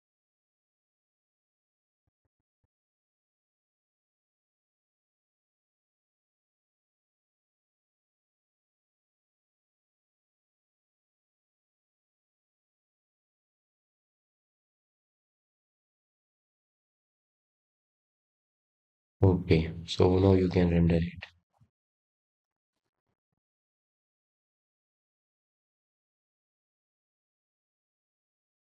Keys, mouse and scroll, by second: 0.8 click, 1.4 click, 2.9 click, 5.3-6.2 scroll down 3, 6.2-7.2 scroll up 4, 7.2-8.5 drag, 9.0 click, 9.9 click, 10.5 click, 11.7 click, 13.1 click, 14.2 click, 16.1-17.0 drag, 17.7 click, 21.0-23.0 middle drag, 23.0 click, 23.9 click, 24.5-24.8 scroll down 2, 26.0 KP_0.